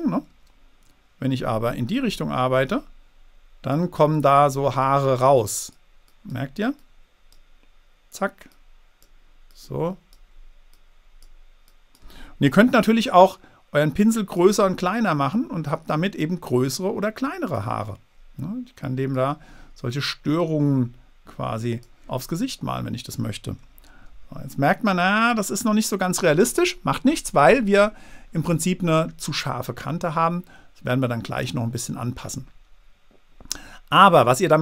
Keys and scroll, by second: 0.2 super+z, 24.2 super+z.